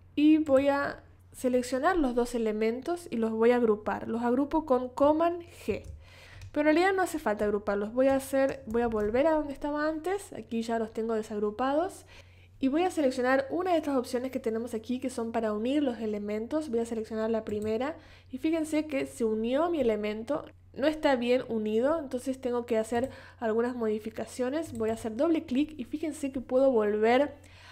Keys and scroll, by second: 5.7 super+g, 8.8 super+z.